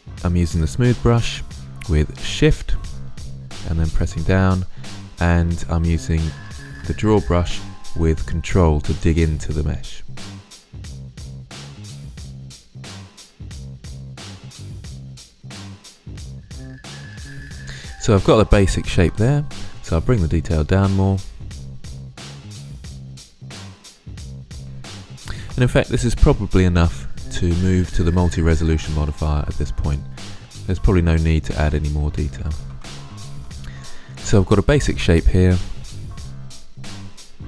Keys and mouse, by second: 0.0 middle drag, 2.7-6.8 drag, 8.3-10.2 drag, 10.3 drag, 10.4-10.7 middle drag, 10.7 click, 11.2 middle click, 11.3 click, 11.8 middle click, 11.9 drag, 12.2 middle click, 12.4 middle drag, 13.0 middle click, 13.1 click, 13.8-14.5 middle drag, 15.0-15.3 middle drag, 16.6 middle click, 17.3-17.7 middle drag, 20.3-22.0 drag, 22.1 middle drag, 22.3 click, 22.9-24.0 middle drag, 27.9-29.6 middle drag, 29.7 middle click, 32.9 ctrl+z, 33.2 ctrl+z, 34.5 middle drag.